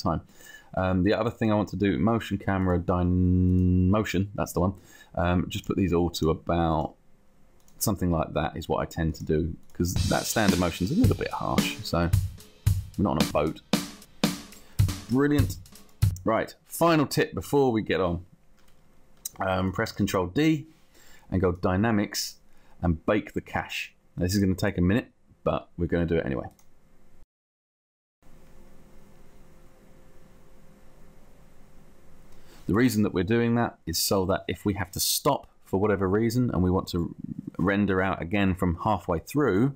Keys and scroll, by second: 20.3 ctrl+d.